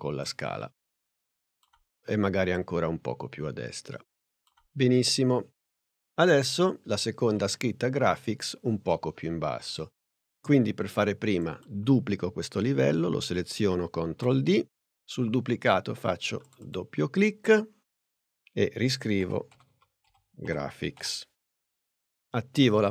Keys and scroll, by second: 2.3 p, 14.1 super+d, 19.0-21.2 typing.